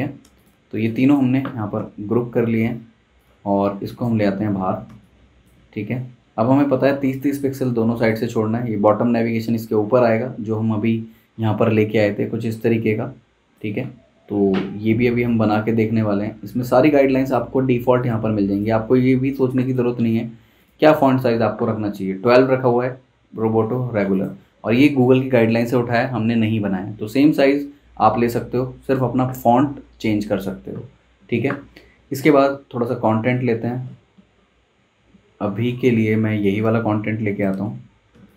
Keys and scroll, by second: 0.7 space, 1.8 super+g, 4.8 space, 37.6 z, 38.1 space.